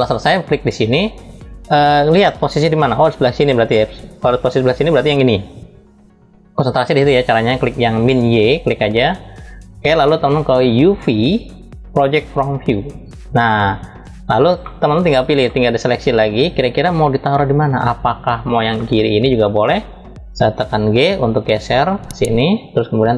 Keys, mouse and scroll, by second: 8.5 click, 12.2 click, 13.6 scroll down 2, 14.3-14.6 middle drag, 15.6-16.3 drag, 16.5 scroll up 2, 17.0 middle click, 22.5 scroll up 1, 23.0 middle click, 23.0 scroll up 1.